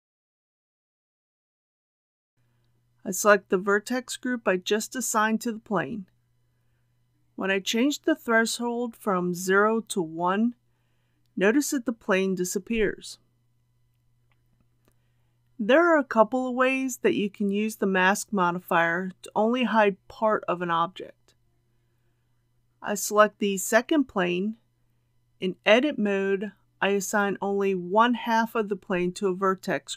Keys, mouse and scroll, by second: 20.3-20.8 scroll down 1, 22.3 click, 24.1 Tab, 26.2 alt+a.